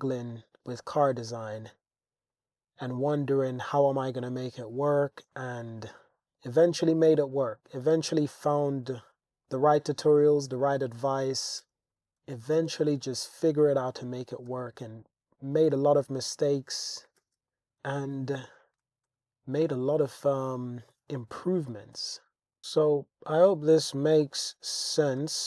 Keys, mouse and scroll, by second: 0.1 click, 0.6 click, 1.1 g, 1.3 y, 2.3 click, 3.4 click, 4.2 g, 4.4 y, 5.7 click, 5.9 Tab, 6.2 Tab, 6.6 g, 6.8 y, 8.3 Tab, 10.6 shift+drag, 11.0 shift+scroll, 11.1 shift+drag, 11.6 Tab, 11.9 g, 12.2 x, 13.1 click, 13.7 click, 14.5 g, 14.8 x, 15.9 click, 17.2 super+r, 17.5 click, 18.1 super+r, 18.2 super+r, 18.4 click, 19.1 Tab, 20.1 Tab, 20.9 click, 21.7 g, 22.0 x, 22.6 y, 23.0 click, 23.4 click, 23.7 g, 23.9 y, 24.9 click, 25.2 Tab.